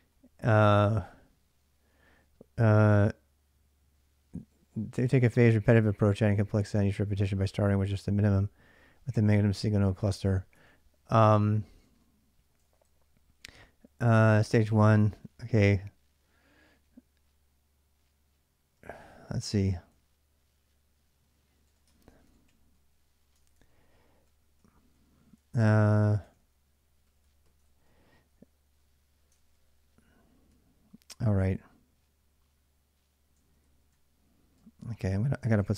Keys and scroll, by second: 0.0-1.1 typing, 8.6 j, 10.0 shift+a, 11.6 shift+;, 12.4 ctrl+[, 12.5 ctrl+j, 13.3-17.1 typing, 18.5-27.0 typing, 21.6 Return, 23.1 ctrl+[, 23.2 ctrl+j, 27.4 ctrl+[, 27.4 ctrl+j, 28.1 typing, 29.1 ctrl+[, 29.3 ctrl+j, 30.0-31.0 typing, 33.0-35.7 typing.